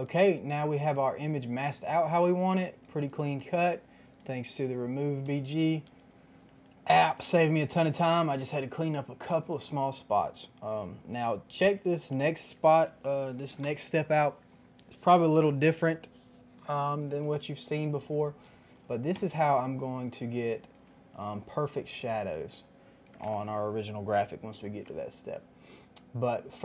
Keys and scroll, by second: 21.2 ctrl+z, 23.0 KP_5, 23.1 KP_0, 23.1 Return.